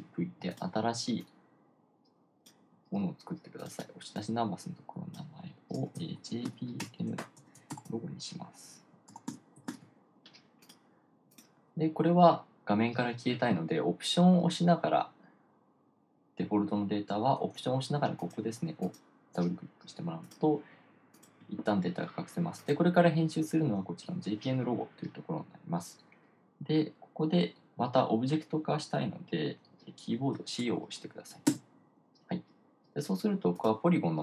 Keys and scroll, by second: 0.2 super+v, 6.8-7.7 typing, 9.4-10.7 typing, 32.0 c.